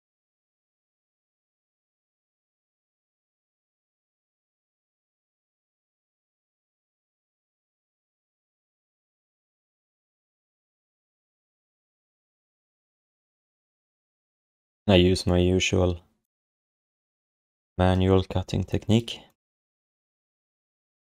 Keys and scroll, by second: 17.3 BackSpace.